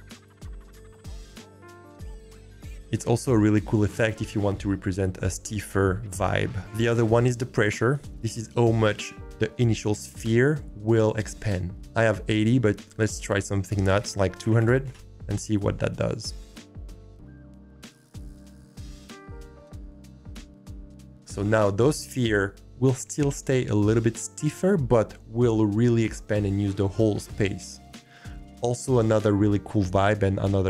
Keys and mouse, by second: 7.9 click, 11.8-14.9 drag, 14.5 0, 16.7 click, 20.7-22.4 drag.